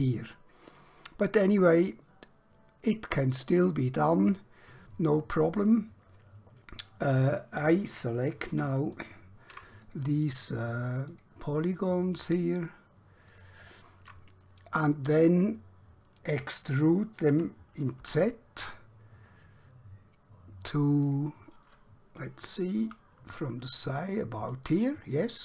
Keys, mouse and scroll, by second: 8.5 3, 9.0 click, 10.0 click, 10.4 shift+click, 11.2 shift+click, 11.8 shift+click, 12.6 shift+click, 14.6 middle click, 17.4 e, 18.0 z, 21.2 click, 22.8 KP_1.